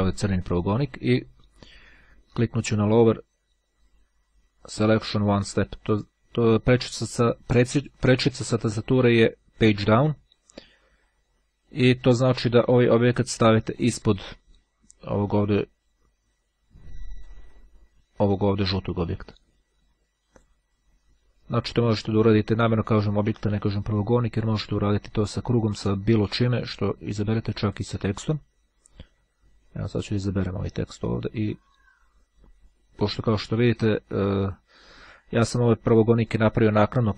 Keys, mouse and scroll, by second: 5.7 click, 11.5 click, 13.7 click, 31.0-33.7 drag.